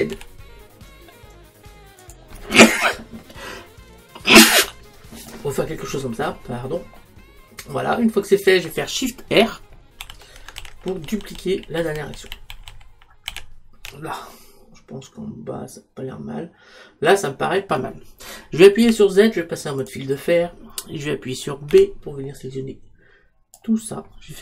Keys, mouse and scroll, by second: 2.1 click, 6.4-10.1 middle drag, 10.1-14.4 shift+r, 18.9 z, 22.5 b.